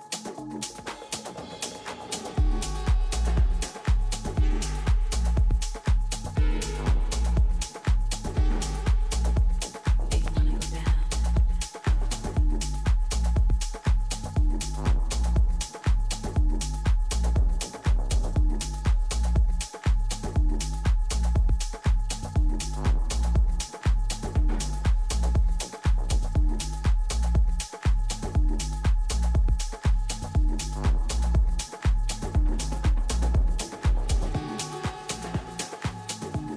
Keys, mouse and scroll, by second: 7.7-10.4 middle drag, 11.6-14.7 middle drag, 15.2-16.1 scroll up 1, 16.1-17.6 middle drag, 17.7-19.2 middle drag, 17.7-19.2 right drag, 19.2 click, 21.0 g, 23.6 a, 24.3-26.3 right drag, 25.2 g, 26.2 click, 27.0 a, 27.8-29.7 right drag, 28.8 g, 30.8 a, 31.1-33.5 middle drag.